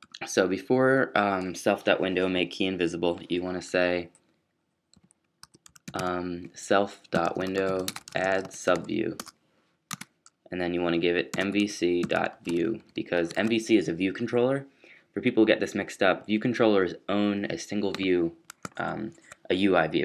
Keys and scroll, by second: 4.9-6.0 typing, 7.1-9.9 typing, 11.0-13.8 typing, 15.2-15.9 typing.